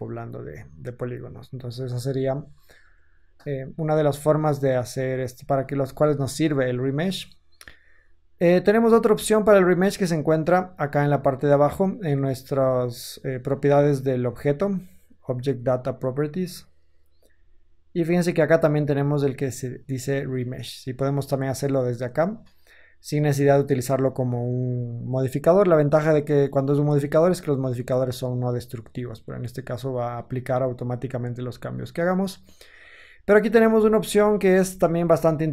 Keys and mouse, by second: 16.7-27.2 middle drag, 27.2 click, 27.3-28.7 middle drag, 28.7 drag, 28.9-33.9 middle drag, 34.0 ctrl+z, 34.4 ctrl+z, 34.9 ctrl+z, 35.0 ctrl+z, 35.1 ctrl+z, 35.3 ctrl+z.